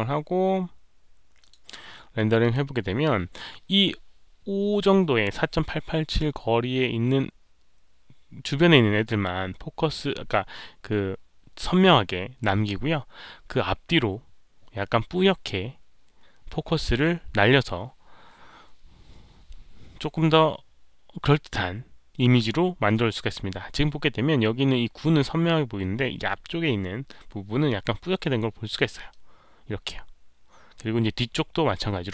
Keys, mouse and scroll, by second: 1.3 click, 2.3 Return, 2.3 click, 2.3 KP_1, 2.3 KP_Decimal, 29.0-30.7 drag.